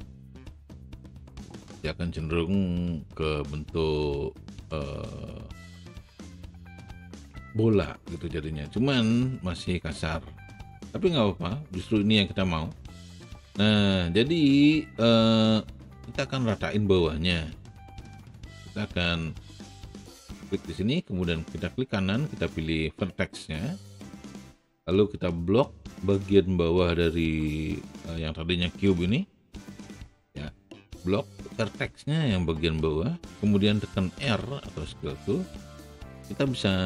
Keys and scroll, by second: 34.2 r.